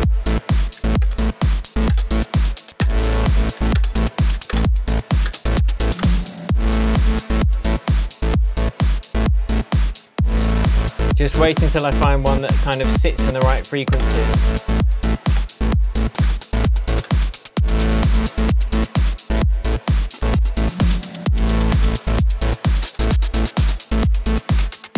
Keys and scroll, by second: 0.5 Right, 1.8 Return, 2.8 Return, 3.7 Return, 4.4 Return, 5.2 Return, 5.9 Return, 13.4 Down, 13.9 Return, 15.0 Down, 15.2 Return, 16.2 Return, 17.0 Return, 17.8 Return, 19.0 Return, 20.2 Return, 20.9 Down, 21.7 Down, 22.8 Down, 23.6 Down, 24.6 Down.